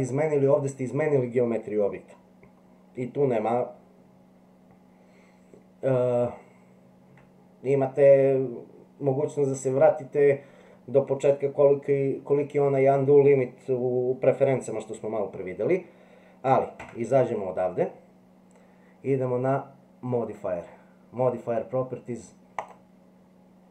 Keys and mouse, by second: 16.8 Tab.